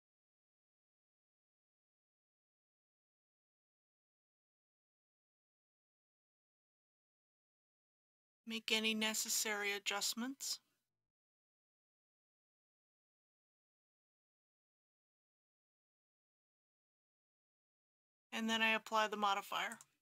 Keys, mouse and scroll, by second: 2.2 click, 6.1 scroll down 1, 7.2-8.2 scroll up 1, 8.2 g, 9.2 x, 12.0 click, 12.3 s, 13.5 click, 13.7 g, 14.2 z, 15.4 click, 15.6 g, 15.7 x, 16.9 click.